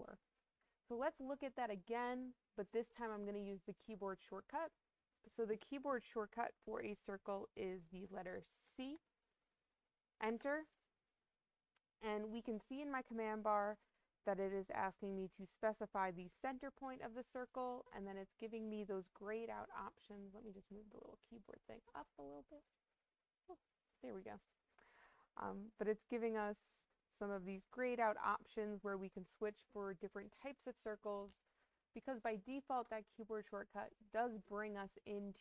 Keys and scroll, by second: 8.5 c, 10.2 Return.